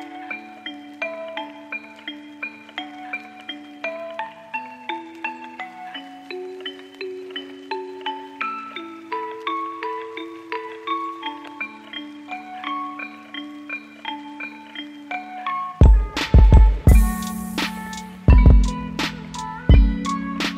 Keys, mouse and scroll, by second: 8.6 ctrl+shift+d, 9.0 Delete, 9.8 ctrl+shift+c, 10.9-12.0 typing, 13.2-13.9 typing.